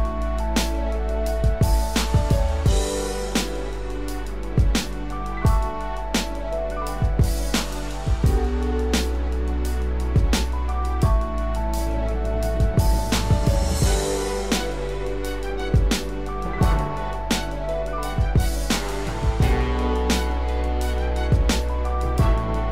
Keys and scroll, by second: 5.1 ctrl+0, 6.0 ctrl+=.